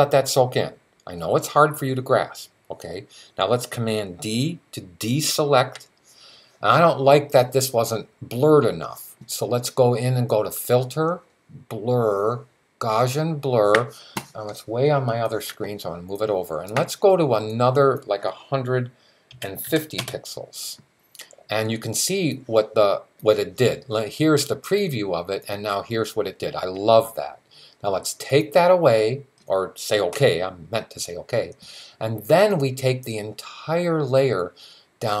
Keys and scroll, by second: 5.2 super+d, 18.9-20.3 typing.